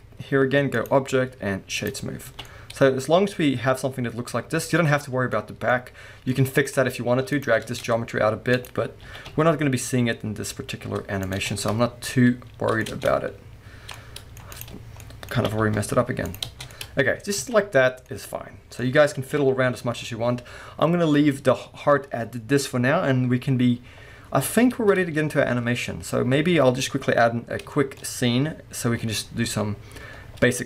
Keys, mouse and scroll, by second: 0.7-2.5 drag, 2.1 scroll down 1, 2.2 alt+a, 2.5 middle click, 4.7-5.3 scroll up 1, 5.3 middle click, 6.0-6.3 scroll up 1, 6.3 middle click, 7.3 click, 7.7 Tab, 8.5 click, 9.0 g, 11.3 click, 11.5 scroll down 1, 11.6-14.5 middle drag, 12.9 scroll up 1, 12.9 Tab, 14.5 click, 15.0 middle click, 15.4 g, 16.4 click, 16.5 Tab, 16.6 scroll down 2, 16.7-17.5 middle drag, 17.5 alt+a, 18.1-19.3 middle drag, 19.3 KP_1, 20.0-24.0 scroll down 2, 24.0-24.6 scroll up 2, 24.6-30.6 middle drag, 24.6-26.9 scroll down 2, 26.9-27.8 scroll up 2.